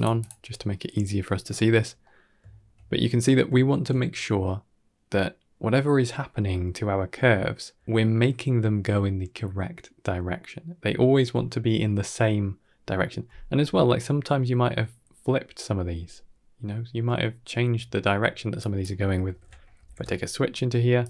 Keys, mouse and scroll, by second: 1.9 middle drag, 2.4 shift+middle click, 3.4 shift+middle click, 13.6 middle click, 18.4-21.0 drag.